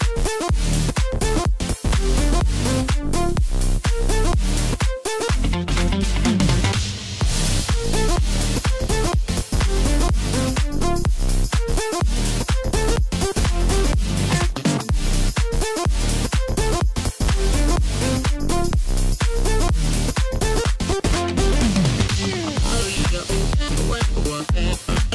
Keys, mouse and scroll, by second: 2.1-2.7 drag, 3.1-3.4 scroll up 2, 3.4 scroll down 2, 3.7-5.1 middle drag, 5.1-5.6 scroll up 2, 5.6-8.5 middle drag, 8.5 click, 9.1 scroll down 2, 9.4 middle click, 10.2-10.5 scroll down 3, 10.5-14.2 middle drag, 15.0-18.0 drag, 18.7 s, 21.2 KP_7, 22.5 s.